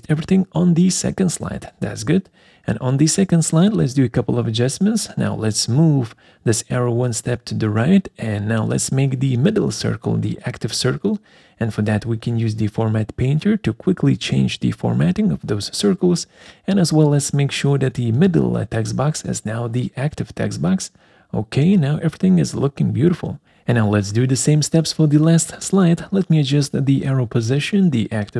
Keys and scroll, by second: 0.4 ctrl+v, 23.5 ctrl+a, 24.1 ctrl+c, 25.2 ctrl+v.